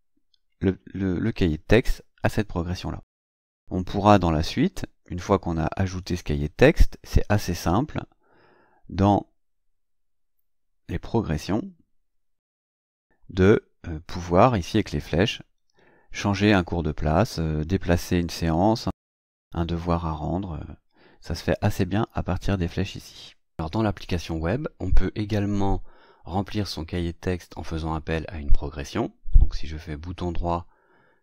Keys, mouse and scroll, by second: 5.9 click, 11.3 click, 13.4 click.